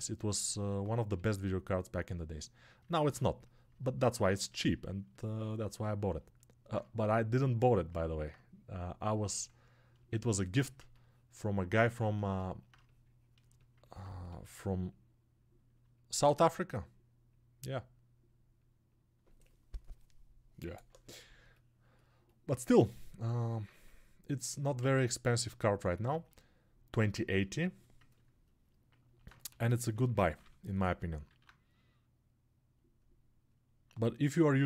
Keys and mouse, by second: 10.8 ctrl+1, 33.8-34.6 alt+drag.